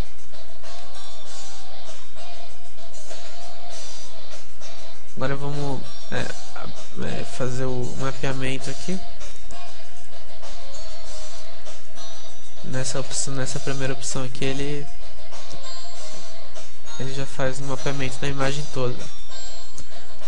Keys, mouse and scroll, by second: 0.0 click, 0.5 click, 0.7 middle click, 1.0 click, 1.7 alt+z, 1.9 click, 2.1 middle click, 2.3 click, 6.4 Tab, 7.0 Tab, 10.1 u, 12.4 Tab, 12.9 Tab, 15.8 u, 17.4 Tab.